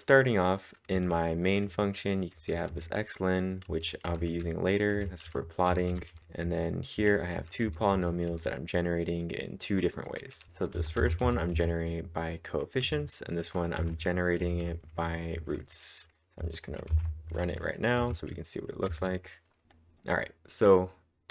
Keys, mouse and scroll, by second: 0.9-2.1 typing, 5.7-8.8 typing, 10.7-11.7 typing, 16.9 ctrl+`, 18.0 Up, 18.9 Return.